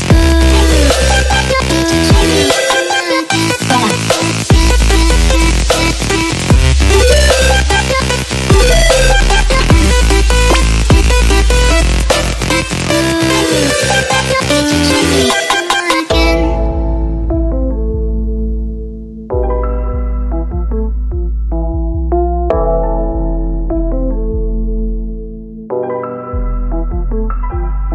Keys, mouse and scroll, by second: 0.4 click, 2.2 click, 4.7 click, 9.9 click, 10.0 ctrl+space, 10.4 click, 10.7 click, 11.6 click, 12.0 ctrl+click, 12.4 click, 12.8 ctrl+click, 14.9 click, 15.7 click, 16.4 click, 18.5 click, 20.6 click, 21.6 click.